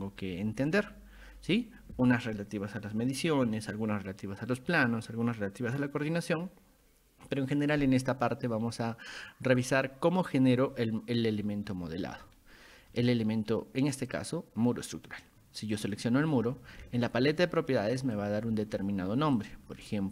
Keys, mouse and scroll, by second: 12.2 scroll up 2, 12.8 scroll down 2, 12.9-13.3 middle drag, 15.8 click, 16.8 ctrl+1, 18.0 click, 19.4-20.1 ctrl+drag.